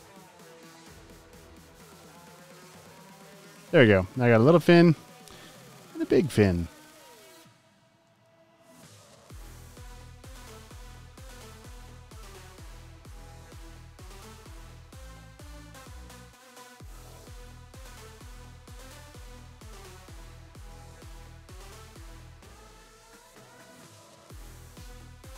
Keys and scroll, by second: 3.6 a, 4.6 super+z, 5.9 space, 6.5 space, 22.7 space, 23.2 alt+super+space, 24.6 v, 25.0 space.